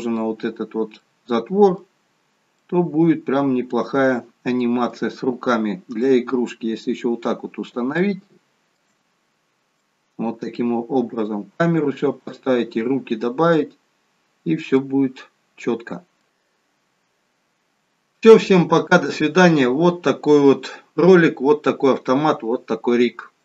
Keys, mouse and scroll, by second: 1.0 middle click, 1.0 scroll down 2, 2.1 scroll up 1, 2.6 middle click, 5.8 scroll up 1, 5.9 middle click, 8.0 shift+middle click, 9.0 scroll down 1, 9.8 middle click, 9.8-12.3 scroll down 1, 14.7 middle click.